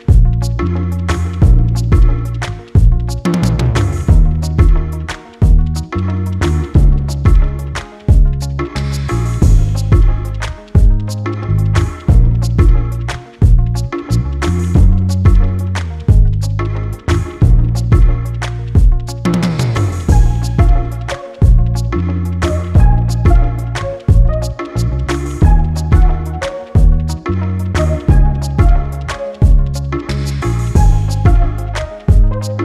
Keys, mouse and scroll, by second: 1.1 click, 1.4-3.9 drag, 3.9 Tab, 4.5 click, 4.8-5.3 scroll up 1, 5.3-10.6 drag, 12.6 Tab, 13.2-13.6 scroll down 3, 13.6-14.0 scroll up 1, 14.0-15.9 drag, 16.9 ctrl+z, 17.6-20.2 drag, 20.3-20.9 scroll down 1, 20.9-22.9 drag, 23.1-26.2 drag, 26.2 Tab, 26.6 Tab, 27.2 a, 27.7-32.6 drag.